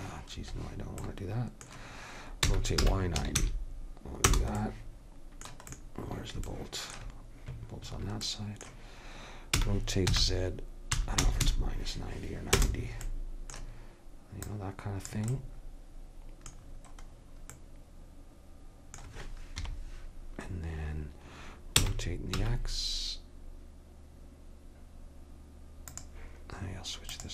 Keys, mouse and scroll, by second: 1.1-2.6 middle drag, 2.6 r, 4.7 middle click, 6.2 middle click, 9.5 r, 14.5-16.5 drag, 16.5-18.3 middle drag, 19.6 KP_3, 21.8 r, 27.1-27.3 drag.